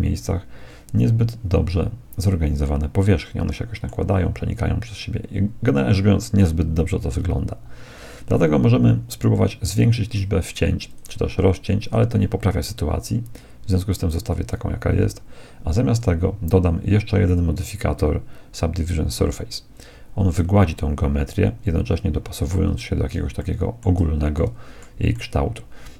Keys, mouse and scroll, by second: 1.6 middle click, 1.9-2.6 scroll up 1, 2.6-4.5 middle drag, 4.9 middle click, 5.2 scroll up 1, 5.3-8.7 middle drag, 9.7-12.8 drag, 14.1-19.2 drag, 21.9-25.9 middle drag.